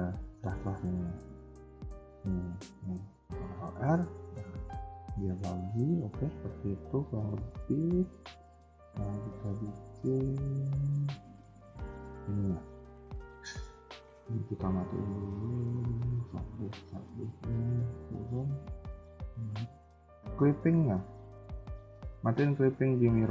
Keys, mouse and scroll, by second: 3.7 ctrl+r, 5.8 scroll down 2, 6.1 KP_3, 6.7 scroll up 1, 6.8 KP_1, 7.0 KP_3, 7.2 KP_1, 7.5 middle click, 8.3 KP_1, 8.7 scroll down 2, 8.9 a, 9.0 a, 9.4 middle click, 10.9 KP_1, 11.3 scroll up 2, 11.6 shift+middle click, 11.9 scroll up 1, 12.6 shift+middle click, 17.9 click, 21.2 click, 21.2-21.5 scroll up 1, 21.9 shift+middle click, 23.2 click.